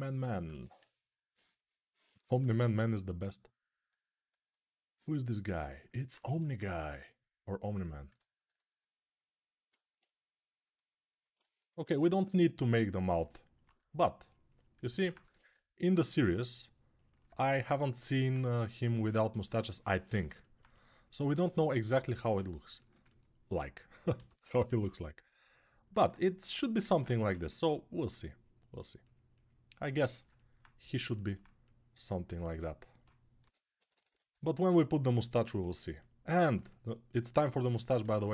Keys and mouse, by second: 0.3 1, 2.0-5.7 right drag, 2.0 2, 6.0 1, 11.3-13.4 alt+right drag, 15.0 1, 22.1-26.6 ctrl+alt+right drag, 23.9 g, 24.4 ], 24.5 ], 24.6 ], 26.9 1, 33.2 g, 33.5 ], 33.6-38.3 right drag, 33.7 ], 33.9 ], 37.5 ctrl+Tab, 37.8 shift+a.